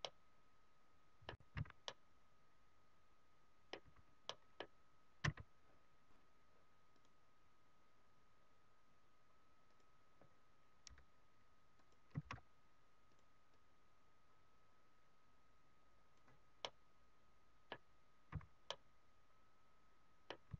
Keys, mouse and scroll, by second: 0.0 middle click, 1.5 z, 1.7 middle click, 3.7 z, 4.2 middle click, 5.3 s, 6.9 click, 11.9 click, 12.1 shift+f, 13.2 click, 13.5 click, 16.7 middle click, 18.3 z, 18.6 middle click, 20.4 z.